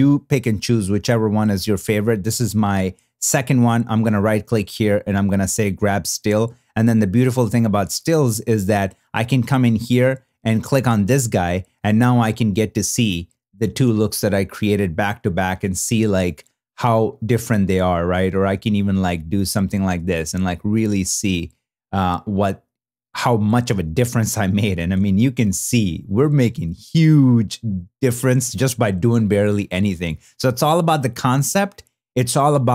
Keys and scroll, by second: 12.4 super+w, 21.8 super+w, 26.9 super+w.